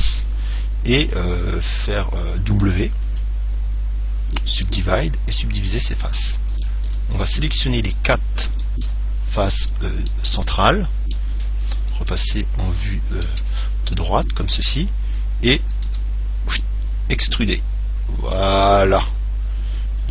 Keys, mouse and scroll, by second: 3.3 w, 6.8-10.4 right drag, 10.3-12.0 middle drag, 12.1 KP_1, 13.5 KP_3, 14.4-16.7 middle drag, 16.1 e.